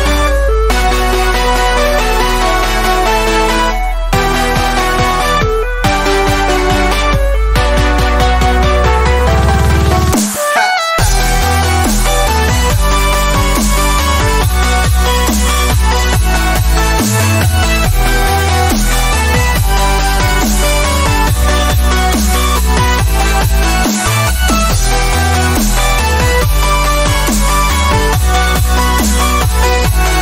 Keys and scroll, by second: 6.5 space, 8.6 space, 13.8 space, 18.6 ctrl+z, 20.1 ctrl+z, 21.9 space, 25.5 alt+space, 26.4 alt+space, 27.5 alt+space.